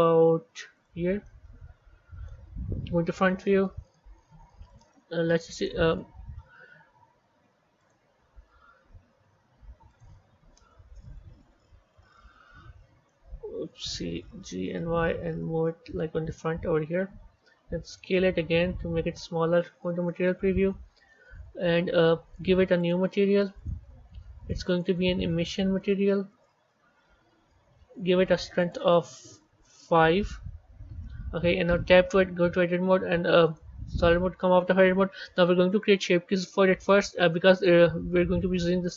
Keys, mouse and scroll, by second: 1.1-2.7 middle drag, 2.7 KP_1, 3.3-4.6 scroll up 3, 4.6 click, 5.4-7.8 drag, 8.2-9.8 scroll down 4, 9.8-12.0 drag, 12.0-14.3 middle drag, 14.3 g, 16.4 KP_1, 16.9-18.0 scroll up 3, 18.0 s, 19.3 z, 20.3-22.7 scroll down 2, 22.7 drag, 23.5-31.7 drag, 31.7 b, 33.9 Tab, 35.6 click, 36.7-37.8 shift+middle drag, 37.8-38.9 scroll up 4.